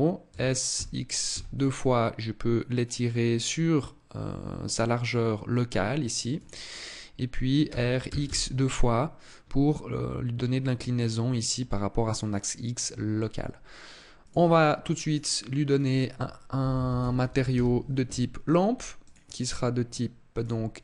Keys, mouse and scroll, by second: 0.0 s, 6.1 click, 7.3 r, 14.0 click, 14.8 click, 15.4 click, 18.7 click.